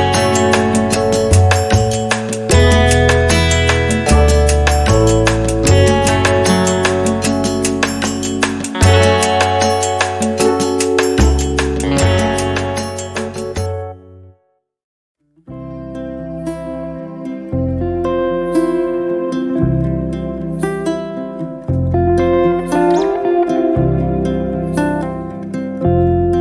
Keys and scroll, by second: 7.8 r, 10.6 r, 12.2 space, 14.6-16.3 typing, 18.1 space, 20.3 m, 22.8 7, 23.3 Return, 23.9 space.